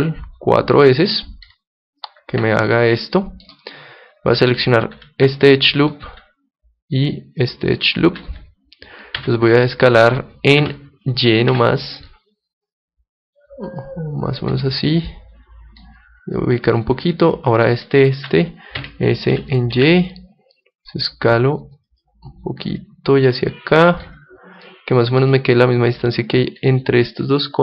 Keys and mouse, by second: 1.6-3.4 drag, 3.1-4.8 middle drag, 5.4-7.2 right drag, 7.4-9.3 right drag, 9.2 s, 14.5-17.6 drag, 17.3-19.7 right drag, 18.8 s, 22.0-24.7 drag, 24.7-27.6 middle drag.